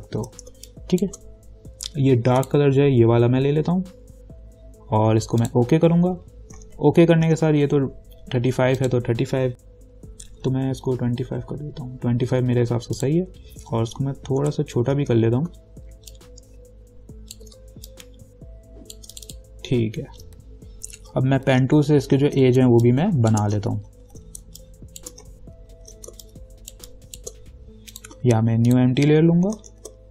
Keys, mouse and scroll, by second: 0.7 space, 0.9 click, 1.2 space, 2.6 click, 5.7 click, 7.0 ctrl+-, 9.0 click, 11.2-12.0 typing, 13.2 click, 14.6 v, 15.0 ctrl+t, 16.3-18.1 alt+drag, 18.1 shift+click, 21.7 p, 22.1 ctrl+=, 22.8 space, 23.0 click, 23.4 space, 24.0 ctrl+=, 24.6 space, 24.8 click, 25.2 space, 25.7 ctrl+=, 26.4 space, 26.4 click, 26.9 space, 28.1 click, 29.9 ctrl+=.